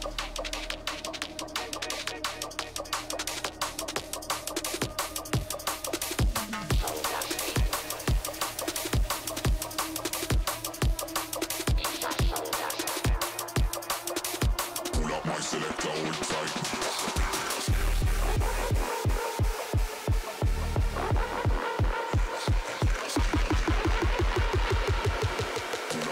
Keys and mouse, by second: 5.1 shift+click, 6.4 click, 8.7 shift+click, 9.7 shift+click, 11.3-13.4 drag, 13.8-15.8 typing, 15.0-15.4 middle drag, 17.0 y, 17.1 y, 18.3 click, 19.6-20.0 drag, 20.0 middle drag, 20.6 middle click, 20.7 g, 22.0 x, 22.0 x, 22.3-23.5 middle drag, 23.5 click, 24.6 click, 24.8-25.4 middle drag, 26.0 s.